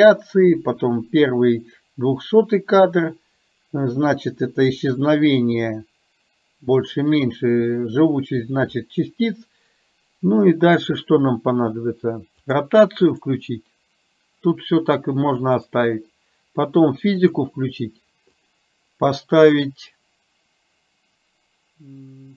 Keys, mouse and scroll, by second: 12.5 click, 13.2 click, 18.5 click.